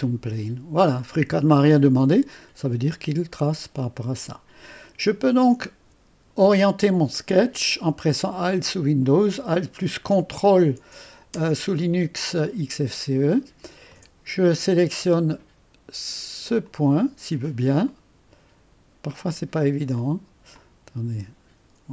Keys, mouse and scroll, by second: 1.3 middle click, 2.0-3.2 right drag, 3.2-5.8 scroll up 2, 5.8 scroll up 1, 12.5-14.3 ctrl+shift+drag, 14.3-16.7 scroll up 2, 16.7 click, 17.5-19.2 scroll up 2, 20.0-21.7 drag.